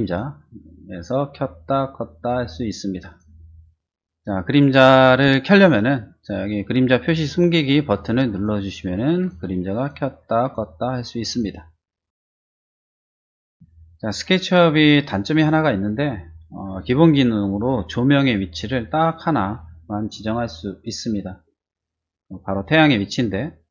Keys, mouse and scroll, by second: 0.0 click, 0.9 click, 2.2 click, 3.1 click, 8.3 click, 9.1 click, 9.7 click, 10.4 click, 11.2 click, 12.8 middle click, 13.1 shift+middle click.